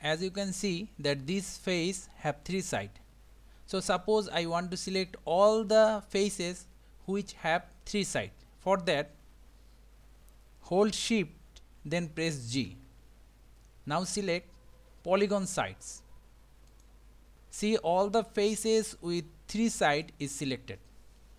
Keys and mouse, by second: 0.0-0.6 shift+middle drag, 1.7 click, 12.7 shift+g, 17.3-20.1 middle drag.